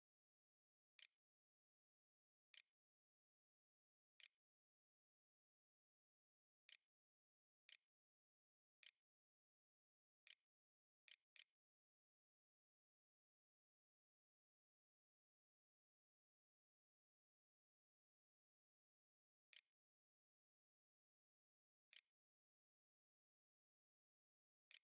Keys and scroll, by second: 0.0-2.3 typing, 1.3 Delete, 3.7 Return, 5.0-12.6 typing, 19.5-20.6 typing, 21.7 shift+9, 24.5-24.8 typing.